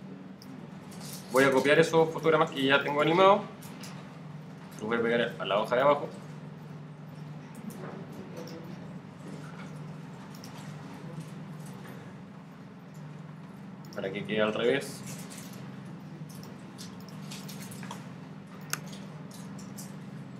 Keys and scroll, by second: 1.1 super+c, 1.9 shift+super+c, 4.6 super+v.